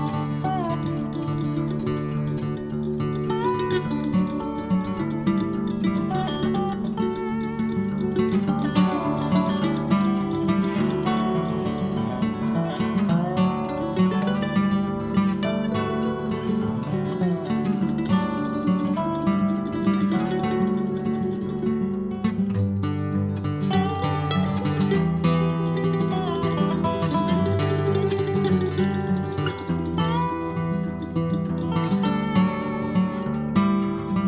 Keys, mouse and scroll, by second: 1.9-2.4 scroll down 5, 2.4 scroll up 1, 3.0-4.1 drag, 4.1 scroll down 2, 4.2-5.6 middle drag, 5.6-6.2 scroll up 2, 6.2-7.3 scroll down 10, 7.3 click, 8.2-10.0 scroll down 29, 10.6 scroll down 12, 11.2-13.1 drag, 13.1 scroll up 2, 13.2 scroll down 1, 13.4-14.9 middle drag, 16.3-19.5 scroll up 54, 19.5 click, 20.3 scroll up 1, 20.4-21.9 middle drag, 22.8-25.4 drag, 25.8 n, 26.6 click, 27.3 n, 28.2 click, 28.9-31.3 right drag, 31.3 click, 31.9 KP_3, 32.4-33.4 scroll up 1, 33.4-34.2 drag.